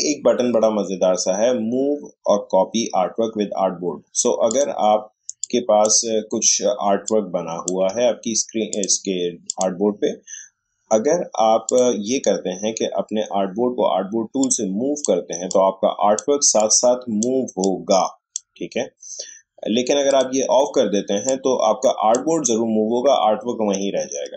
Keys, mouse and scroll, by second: 4.5-7.0 drag, 7.0-8.7 shift+drag, 14.4-24.3 drag.